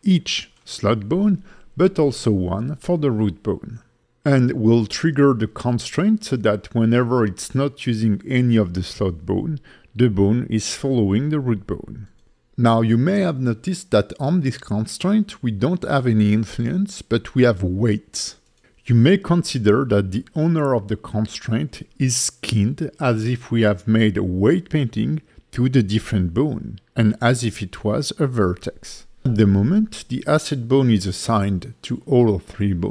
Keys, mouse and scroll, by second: 0.7 click, 1.7 click, 3.0 click, 3.7 click, 4.6 click, 5.7 click, 7.3 click, 9.0 alt+middle click, 29.1 click, 29.1 middle click, 32.8 click.